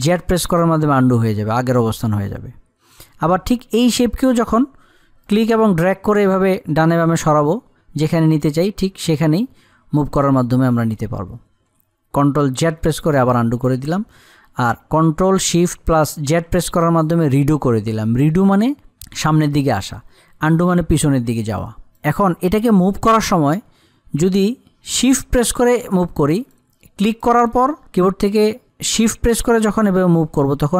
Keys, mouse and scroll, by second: 0.5 ctrl+z, 4.3-13.1 drag, 13.1 ctrl+z, 16.7 ctrl+shift+z, 21.5 click, 25.7 click, 28.5-30.7 drag.